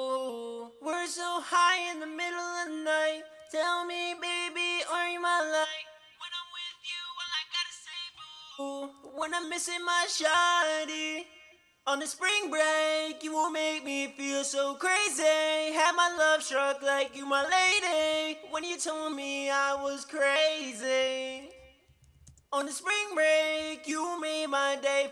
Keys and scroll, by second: 17.7-18.5 typing, 21.8-22.7 typing.